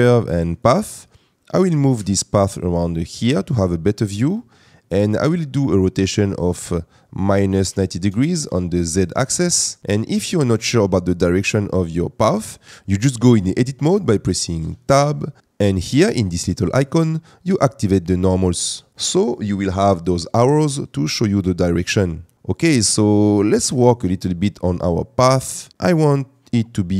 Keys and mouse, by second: 2.0 g, 2.5 x, 6.3-8.2 drag, 14.6 Tab, 17.0-18.9 drag, 22.3 Tab, 23.3 Tab.